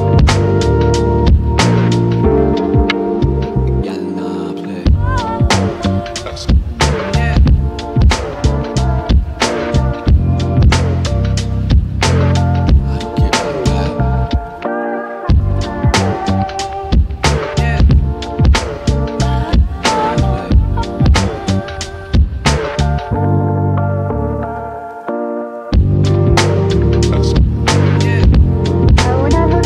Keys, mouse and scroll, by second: 2.3 click, 2.8-5.3 right drag, 5.3-5.7 scroll up 1, 6.3-9.7 drag, 6.3 typing, 10.3 scroll down 1, 12.0 click, 12.5 scroll down 1, 13.5 right click, 14.0 scroll up 1, 15.0-17.9 drag, 22.5-23.2 typing, 23.8-27.6 shift+drag, 29.3 right click.